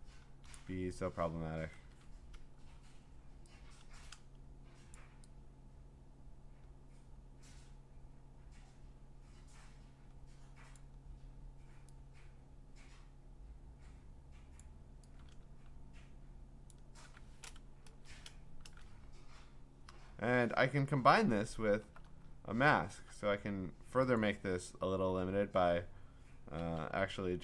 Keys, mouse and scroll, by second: 0.2 scroll, 0.5 click, 1.7 ctrl+t, 1.7 click, 4.9 click, 10.7 click, 14.6 click, 16.7 shift+click, 17.8 Return, 21.3-22.1 ctrl+scroll up 6, 22.1-23.0 scroll down 6, 23.1-24.2 scroll, 24.2 click, 26.6 m.